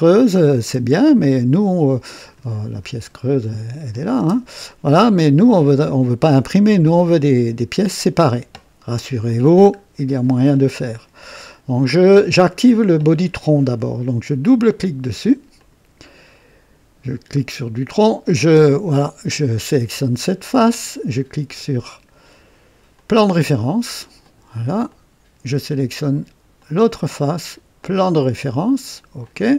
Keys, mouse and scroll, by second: 0.1 click, 0.6 space, 1.0-2.5 drag, 3.9 click, 4.2 space, 4.7 click, 5.9 click, 8.3-9.6 drag, 9.8 scroll up 2, 14.4 click, 15.6 click, 18.3 click, 23.0 click, 24.2 click, 24.9-26.2 drag, 26.6 click, 27.8 click, 29.2 click.